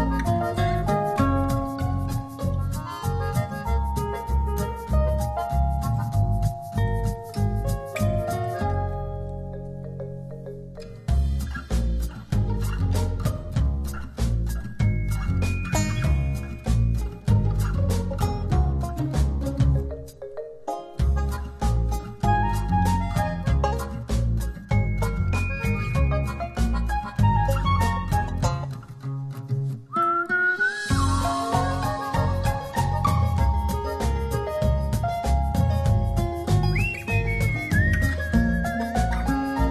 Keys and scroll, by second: 10.4 super+j, 14.8 v, 15.5 shift+v, 16.9 shift+super+t, 23.8 shift+Down, 31.1 shift+Left, 33.5 Return.